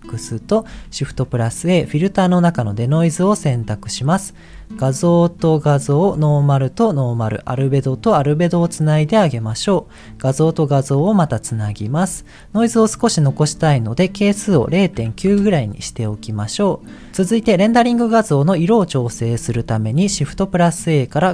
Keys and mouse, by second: 3.7 click, 4.8-5.9 drag, 6.1 click, 7.3 click, 8.4 click, 8.8 click, 10.1 click, 10.4 click, 11.5 click, 13.4-15.2 drag.